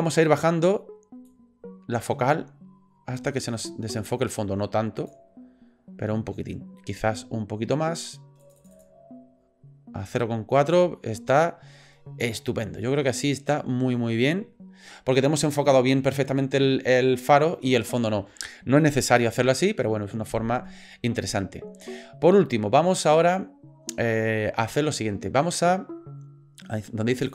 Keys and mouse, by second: 1.3-2.9 drag, 8.4 click.